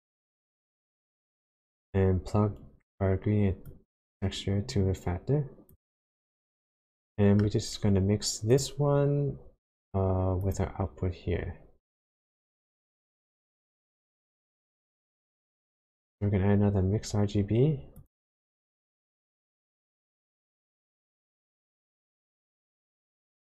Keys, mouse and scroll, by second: 3.7 click, 6.6 middle click, 8.5 click, 10.4 click, 12.2 click, 14.8 click, 15.4 shift+a.